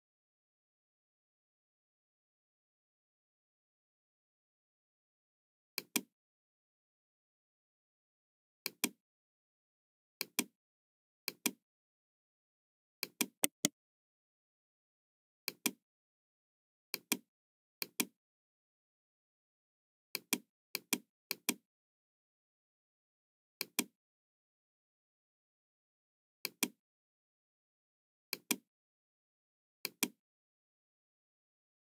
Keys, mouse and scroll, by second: 0.5 KP_5, 1.1 Return, 5.6 click, 8.5 click, 10.1 click, 11.2 click, 12.9 click, 13.3 right click, 15.6 click, 16.9 click, 17.7 click, 19.2 scroll down 1, 20.1 click, 20.6 click, 21.2 click, 23.5 click, 26.3 click, 28.2 click, 29.8 click, 30.8-31.1 scroll up 1, 31.2-31.5 scroll down 1.